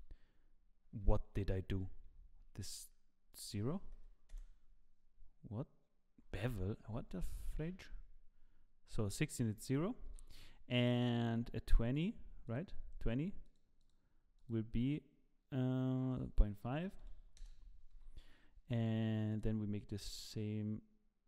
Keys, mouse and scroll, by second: 1.6 ctrl+z, 3.3 click, 6.8 ctrl+z, 6.9 ctrl+z, 11.3-12.0 drag, 13.5 click, 13.9 click, 14.5 click, 17.5 click, 17.9 i, 19.3 click, 19.3 i.